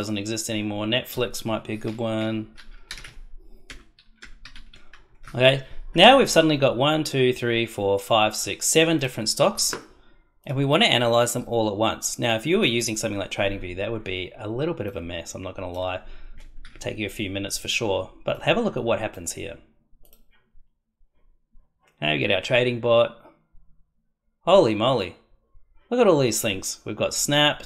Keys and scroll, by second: 2.1 Right, 2.8-4.9 typing, 16.6 ctrl+s.